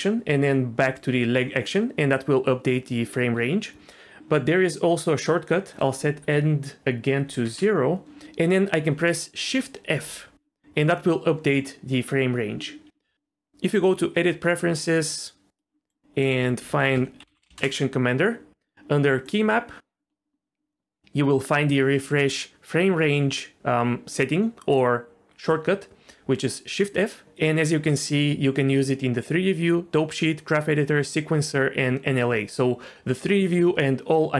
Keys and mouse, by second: 9.9 shift+f, 13.6-14.5 drag.